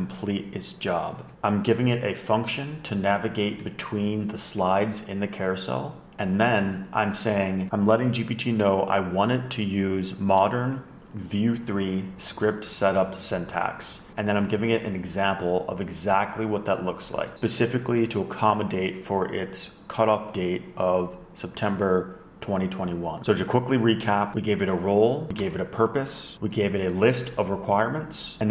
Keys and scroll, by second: 1.9 Left, 7.7 super+Right, 7.8 super+Left, 16.4 scroll down 1, 23.7 Left, 24.8 shift+super+Right, 25.4 Left, 25.6 Down, 25.8 Down, 26.1 shift+super+Right.